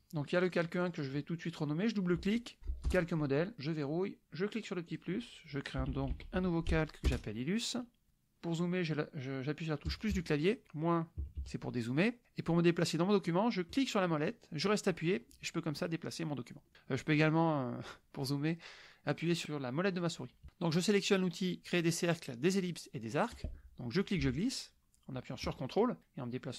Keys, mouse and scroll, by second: 0.5 click, 0.8-2.6 drag, 2.6 e, 2.9 Return, 3.7-4.5 drag, 4.8 click, 5.6-6.8 typing, 7.1 Return, 9.9 KP_Add, 11.2 KP_Subtract, 14.9-16.7 drag, 19.9 click, 23.3 click, 24.0-26.5 ctrl+drag.